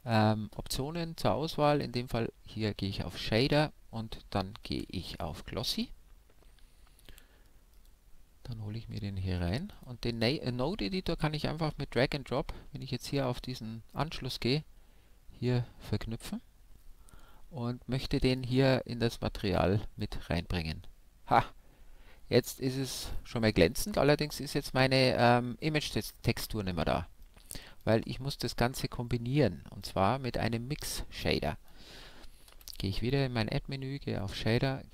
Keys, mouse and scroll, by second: 4.7 shift+a, 9.9-11.6 drag, 12.0-13.8 drag, 27.2-32.2 drag, 32.5 shift+a.